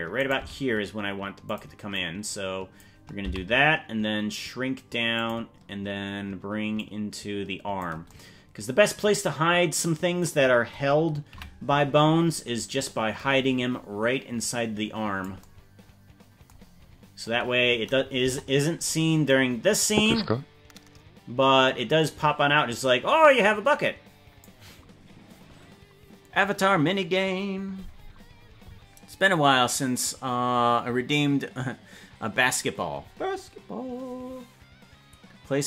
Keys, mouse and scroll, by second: 0.3 right click, 0.5 g, 1.9 click, 3.3 s, 6.7-7.8 drag, 11.4 KP_Decimal, 12.2-12.8 scroll down 8, 14.4 click, 16.7-17.8 scroll down 8, 18.2 KP_0, 19.3-24.4 drag.